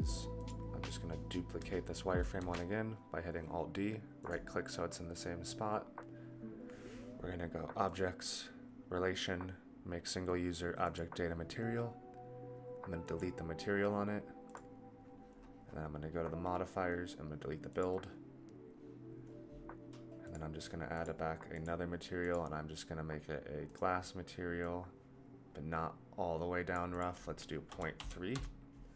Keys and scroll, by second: 2.4 alt+d.